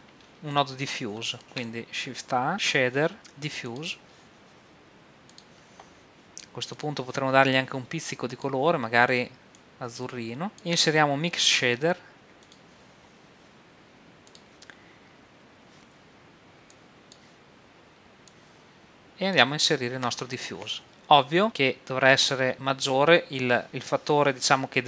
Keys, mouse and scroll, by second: 0.5 middle click, 1.4 middle click, 1.4 shift+a, 5.4-10.1 drag, 10.6-12.5 drag, 10.6 shift+a, 14.3-20.1 drag.